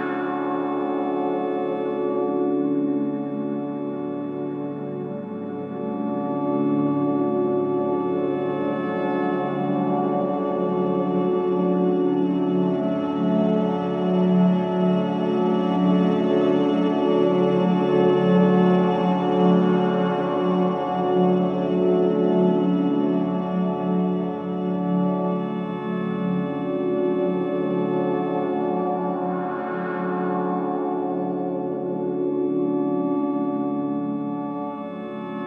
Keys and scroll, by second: 1.1 4, 4.5 3, 5.1 ], 6.7 ctrl+x, 7.1 Escape, 8.4 shift+g, 18.7 ], 19.1 F1, 25.8 2, 26.3 ctrl+z, 27.3 ], 29.4-30.9 typing, 31.4 Return.